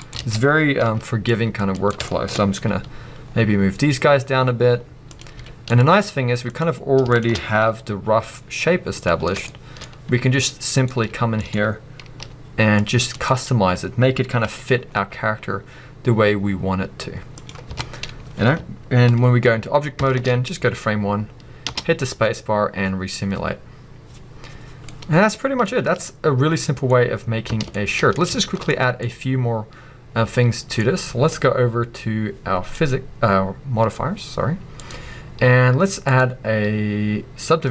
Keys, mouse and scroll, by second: 0.1 right click, 0.1 a, 1.9 right click, 2.1-2.7 shift+middle drag, 2.7-5.1 drag, 6.6-7.6 middle drag, 6.6 click, 7.1 shift+click, 9.1 middle click, 10.8 click, 12.0 scroll up 2, 13.2 right click, 17.7 Tab, 17.8-20.0 scroll down 2, 20.0 shift+Left, 20.7-21.6 scroll up 1, 21.6 space, 25.0-32.7 middle drag, 27.5 space, 28.3-29.0 shift+scroll up 3, 30.8-32.7 scroll up 2, 32.7-37.7 drag.